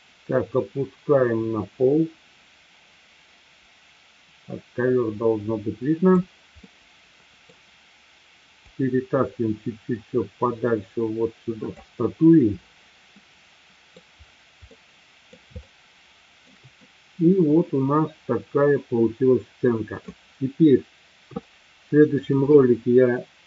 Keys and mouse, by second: 6.7-7.5 middle drag, 8.8-11.8 drag, 13.2-14.1 middle drag, 14.7-15.3 middle drag, 15.7-16.5 shift+middle drag, 16.8-20.1 middle drag, 21.4-22.2 shift+middle drag.